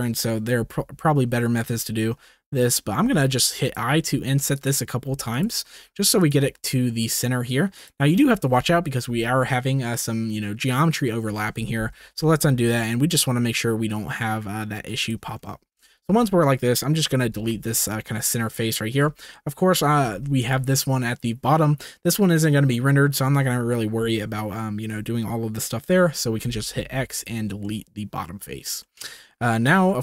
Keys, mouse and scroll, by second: 0.5 t, 3.0-6.4 typing, 5.3 click, 11.8 ctrl+z, 13.0 i, 15.8 shift+middle click, 17.1 x, 18.2 click, 19.2 click, 20.1 shift+middle click, 26.4 x, 27.6 middle click, 28.8 shift+middle click, 29.6 middle click.